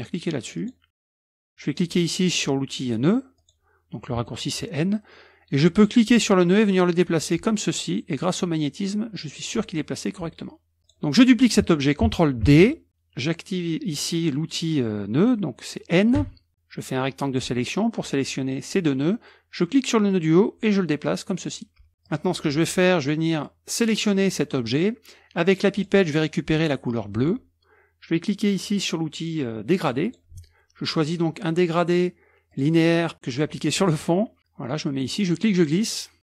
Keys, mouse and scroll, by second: 0.6 click, 3.4 click, 6.1-7.4 drag, 8.2-9.9 drag, 10.8 click, 12.6 ctrl+d, 16.3 F2, 16.5-17.9 drag, 20.1-21.8 drag, 22.1 click, 23.0-23.6 drag, 25.8 click, 27.2 click, 30.1 click, 32.5 click, 33.8 click, 35.2-36.3 drag.